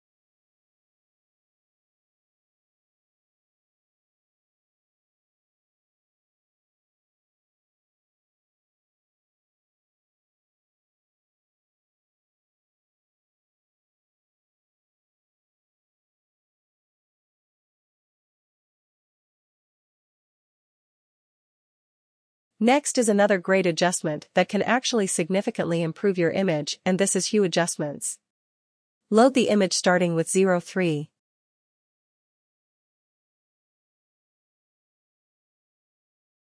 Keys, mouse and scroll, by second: 0.7 click, 1.8 click, 2.7 click, 10.2 click, 11.5 click, 14.3 click, 14.5 click, 16.1 click, 18.1 click, 21.5 click, 26.2 click, 28.3 click, 30.4 click, 34.7 click.